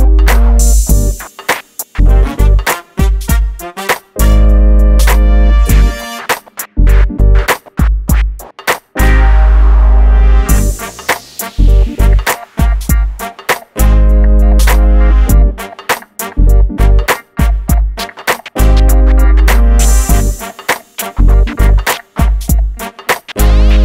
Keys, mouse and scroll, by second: 0.0 scroll up 1, 0.0 r, 1.1 click, 4.4 typing, 4.6 scroll down 1, 5.2 shift+middle click, 6.4 scroll down 1, 6.5-8.5 scroll up 1, 8.8-9.8 scroll down 1, 9.8 click, 11.1 middle click, 11.9 shift+middle click, 12.4 click, 13.0 g, 13.6 click, 14.7 g, 15.6 m, 16.1 click, 16.4-17.0 scroll down 1, 17.1 shift+middle click, 19.6 click, 23.1 middle click.